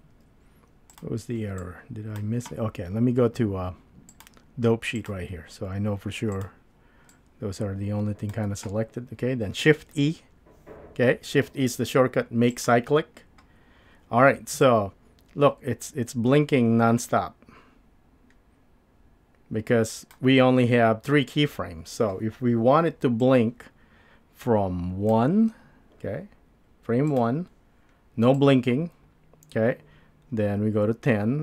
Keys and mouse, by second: 0.1 n, 0.9 click, 1.8-2.2 drag, 4.2-5.1 drag, 6.3 click, 7.2-8.3 drag, 9.9 shift+e, 14.7-17.7 drag, 18.7-19.6 drag, 20.0 click, 23.2-24.7 drag, 24.9 click, 27.1 drag, 28.4-29.5 drag, 29.5 drag, 30.0-31.1 drag, 31.3-31.4 drag.